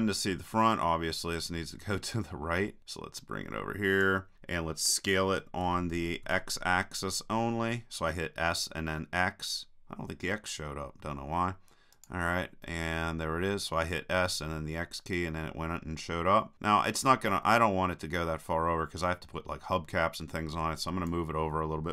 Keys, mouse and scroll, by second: 1.9-3.5 drag, 5.7 s, 12.1-13.8 drag, 14.0-15.7 drag.